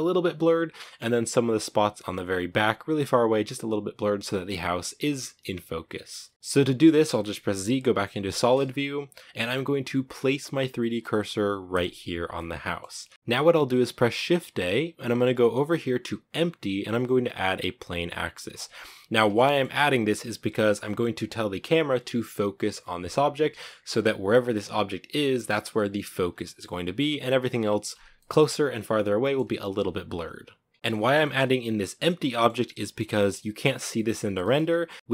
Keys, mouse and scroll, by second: 7.5 z, 8.0 z, 8.4-8.8 scroll up 2, 11.5 click, 12.1-12.5 middle drag, 12.5-12.9 scroll up 2, 12.9-18.4 middle drag, 18.9-19.3 shift+middle drag, 19.3 scroll up 2, 23.1 s, 23.7 g, 26.0 scroll up 1, 26.1 middle click, 27.1 scroll down 1, 27.6 scroll down 3, 27.9-29.2 middle drag, 29.2-30.7 scroll up 1, 30.7-31.3 shift+middle drag, 31.3 g, 32.0 middle click, 32.2 scroll up 2, 32.7 g, 33.7-34.9 middle drag, 34.9 g, 35.0-35.1 middle drag.